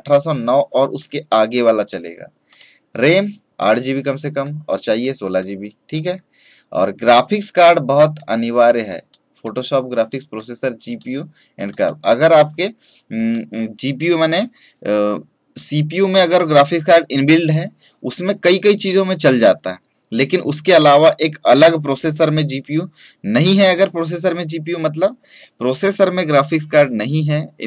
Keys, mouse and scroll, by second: 8.1-27.6 drag.